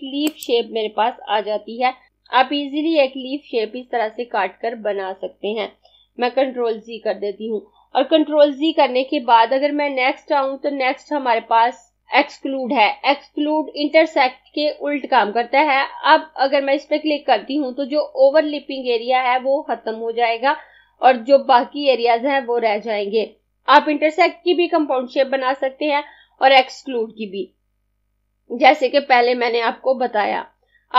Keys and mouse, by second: 6.4 ctrl+z.